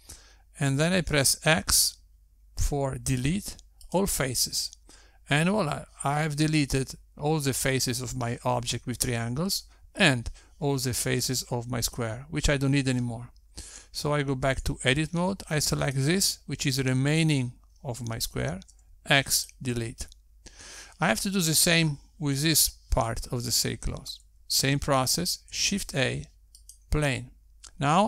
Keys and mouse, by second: 2.6 x, 16.0 Tab, 17.5 click, 20.3 x, 26.8 shift+a.